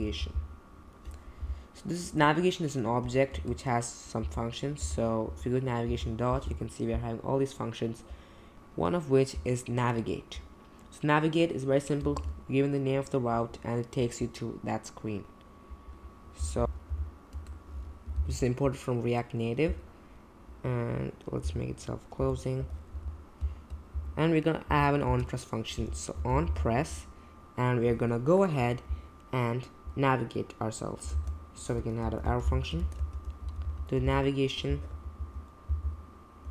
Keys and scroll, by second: 3.3 Return, 4.2 n, 4.8 a, 5.2 Return, 5.8 ., 12.1 shift+9, 16.4-18.2 typing, 21.4 BackSpace, 22.2 Left, 22.6 /, 22.9 Left, 23.4 space, 23.5 space, 23.9 Left, 24.7 Left, 25.1-26.9 typing, 31.1 shift+9, 32.0 Right, 32.2-36.5 typing, 36.4 Return.